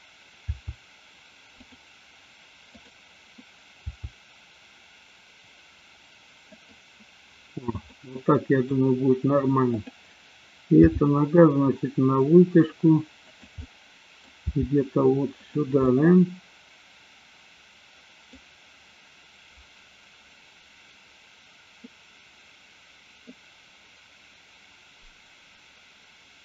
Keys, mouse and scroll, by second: 0.6 r, 2.7 click, 3.8 r, 6.7 click, 8.0 middle click, 9.6 click, 10.8 g, 13.5 click, 13.6 middle click, 14.6 g, 15.8-18.3 middle drag, 23.3-26.4 middle drag.